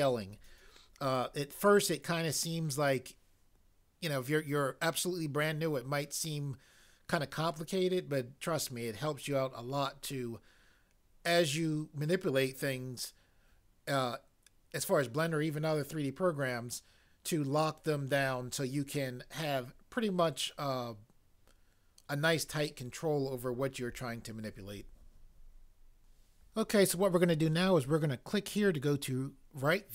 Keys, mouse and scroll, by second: 26.0 click, 28.5 click.